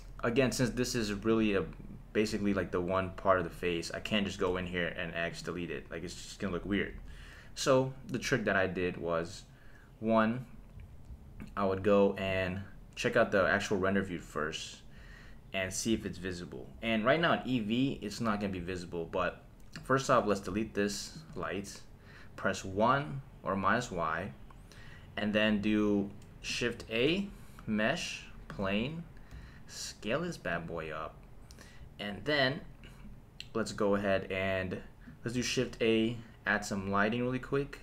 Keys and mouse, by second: 1.3 click, 2.3 Tab, 3.4 click, 4.5 x, 6.9 super+z, 7.8 Tab, 12.3 click, 19.9-21.3 drag, 20.5 x, 22.7 KP_1, 26.8 shift+a, 29.3 s, 30.5 click, 35.3 shift+a.